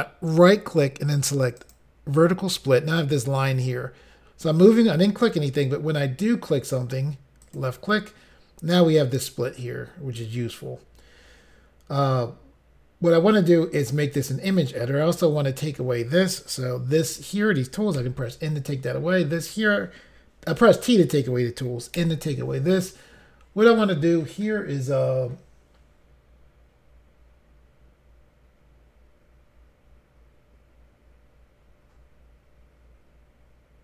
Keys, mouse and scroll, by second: 0.3 right click, 1.6 click, 1.7 click, 7.5 click, 22.0 n.